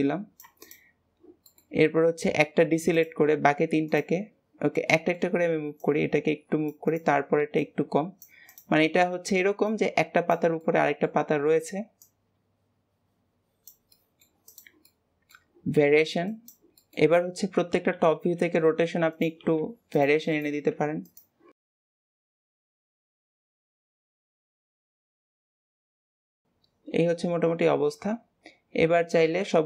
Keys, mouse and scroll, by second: 0.6 shift+click, 1.4-2.9 shift+middle drag, 2.9 shift+click, 3.8 click, 4.9-5.7 middle drag, 5.7 click, 6.8 click, 7.5 click, 8.4 click, 9.6 click, 10.5-11.9 middle drag, 11.9 click, 13.9-14.5 middle drag, 14.5 drag, 14.8-15.7 middle drag, 15.7 r, 16.7-17.3 middle drag, 17.3-18.2 scroll down 2, 18.2 KP_7, 19.1 click, 20.3 click, 21.5 click, 21.9 click, 22.6 click, 22.7 middle click, 22.9 r, 23.2 drag, 23.5 middle drag, 23.7 click, 23.8 middle drag, 24.0 r, 24.2 click, 24.5 middle click, 24.9 drag, 25.6 middle click, 25.8 r, 26.0 middle click, 26.1 click, 26.3-28.9 middle drag, 29.3-29.6 scroll down 2.